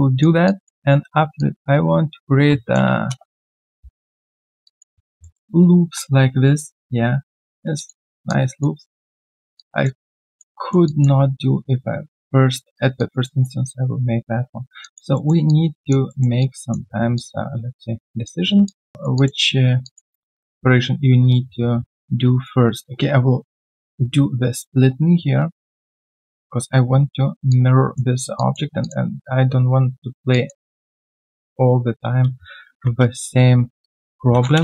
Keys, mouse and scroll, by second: 0.4 alt+click, 3.7 Return, 3.9 right click, 4.6 alt+click, 4.9-5.2 alt+scroll down 1, 5.2 alt+middle click, 7.7 alt+click, 8.0 alt+middle click, 8.2 alt+click, 9.2 alt+click, 9.2 alt+scroll down 1, 9.5 alt+click, 10.0 alt+right click, 10.3 alt+click, 10.5 alt+middle click, 10.8 alt+click, 12.5 alt+click, 12.7 alt+right click, 12.9 alt+click, 14.8 alt+click, 15.1 alt+middle click, 15.4 alt+click, 16.1 alt+middle click, 16.3 alt+click, 16.9 alt+scroll down 1, 17.1 alt+click, 18.4 alt+scroll down 1, 18.6 alt+click, 18.9 alt+right click, 19.1 alt+click, 19.8 alt+click, 20.0 alt+middle click, 20.3 alt+click, 21.9 right click, 27.5 alt+click, 28.3 alt+click, 30.3 alt+click, 30.7 right click, 32.6 ctrl+shift+x.